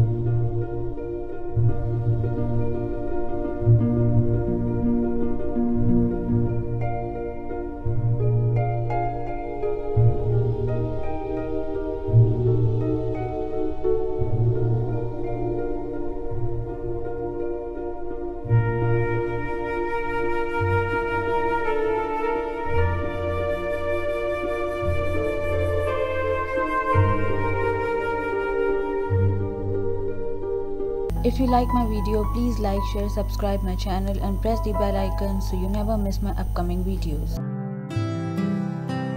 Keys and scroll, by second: 27.2 ctrl+alt+shift+;.